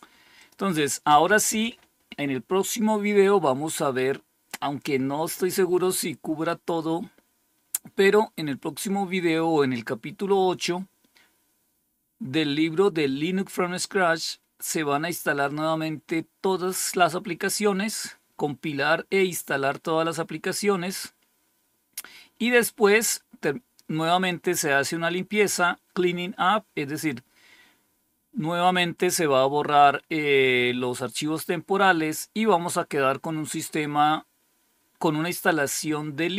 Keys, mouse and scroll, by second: 6.8-7.5 scroll down 1, 10.3-11.1 scroll down 1, 11.3-14.1 scroll down 1, 14.3-15.0 scroll down 2, 15.8 scroll down 2, 16.4 scroll down 2, 17.3 scroll down 2, 19.3-21.5 scroll down 4.